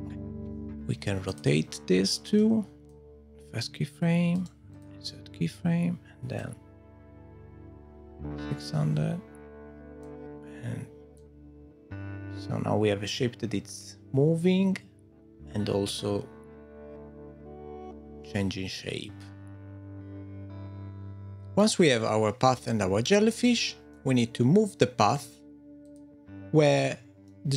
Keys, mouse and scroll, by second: 0.8 middle click, 0.8 click, 1.4 click, 2.2 middle click, 2.8 click, 4.3 right click, 6.8 click, 11.2 click, 21.0 middle click, 23.9 middle click, 25.8 click, 27.3 middle click.